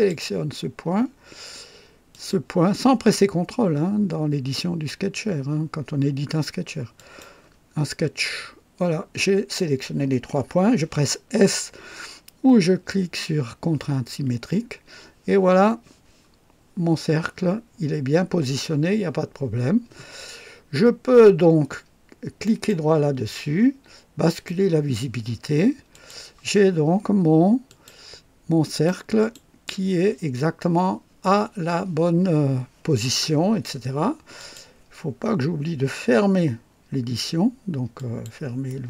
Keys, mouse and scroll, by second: 2.1 click, 6.9 click, 14.0 s, 22.4 right click, 22.4 click, 24.2 click, 25.9 click, 27.6 click, 28.7 click, 29.1 click, 34.3 click, 37.9 click.